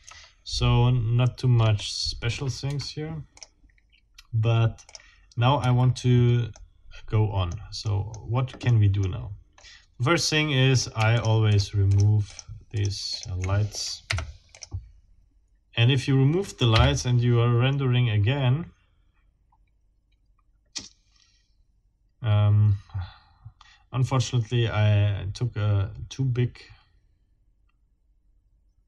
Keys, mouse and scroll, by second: 0.9 ctrl+alt+scroll down 3, 1.6-1.9 scroll up 2, 2.7 Escape, 3.4 middle click, 4.9 click, 5.6 Escape, 6.5-7.7 middle drag, 7.8 middle click, 8.7 middle click, 9.5 scroll up 1, 9.9 scroll down 1, 10.7 click, 11.0-13.4 shift+scroll down 7, 14.1 shift+Delete, 14.5-14.8 shift+scroll up 1, 16.7 F12.